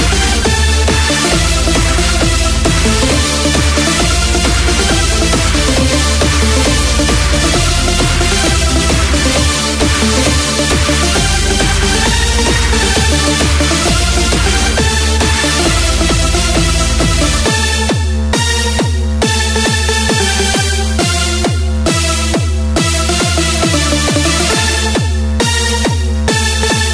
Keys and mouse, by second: 3.3 click, 21.4 click.